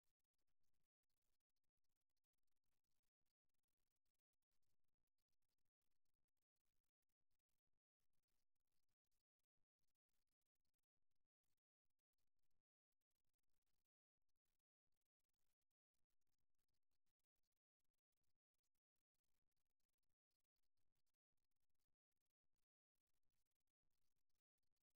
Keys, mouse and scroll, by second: 1.3-3.9 middle drag, 5.3-6.5 middle drag, 6.5-9.1 drag, 9.1 middle click, 12.9 middle click, 13.3 click, 14.2-16.0 middle drag, 18.1-21.9 middle drag, 21.9 ctrl+r.